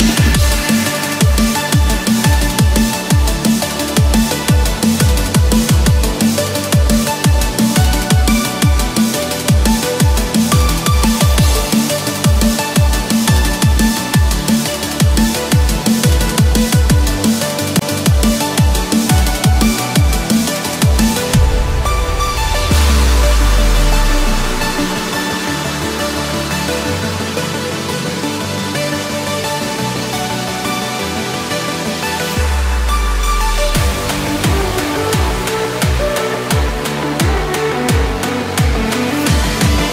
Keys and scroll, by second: 0.9 ctrl+=, 5.4 Return, 6.1 Escape, 9.0 Return, 9.6 Escape, 12.3 Return, 12.8 Escape, 16.5 Return, 17.5 Escape, 19.6 Return, 20.2 Escape, 22.8 Return, 23.4 Escape, 26.6 Return, 27.3 Escape, 30.4 Return, 33.5 Escape, 33.7 Return, 34.3 Escape, 37.5 Return, 38.3 Escape, 39.0 ctrl+-, 39.6 ctrl+=.